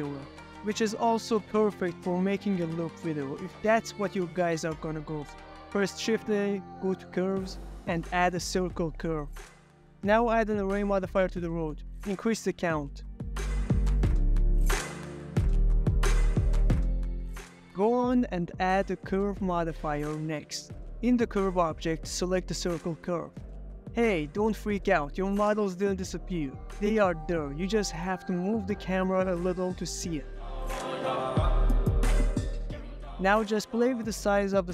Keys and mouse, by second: 0.0 shift+a, 0.2 shift+a, 2.8 s, 4.4 ctrl+a, 7.4-8.5 drag, 9.6 click, 10.4 click, 11.9 click, 14.1-14.7 middle drag, 15.0 click, 16.5 ctrl+a, 19.6-21.0 drag, 21.4 click, 21.9-23.1 drag, 24.3 click, 25.6 drag, 26.0 s, 27.0 Escape, 27.1-27.6 middle drag, 27.8 middle click, 28.2 s, 30.6 Escape, 30.9 ctrl+middle drag, 31.4 ctrl+middle click, 31.7 ctrl+middle click, 32.0 ctrl+click, 32.4 ctrl+click, 32.9 s.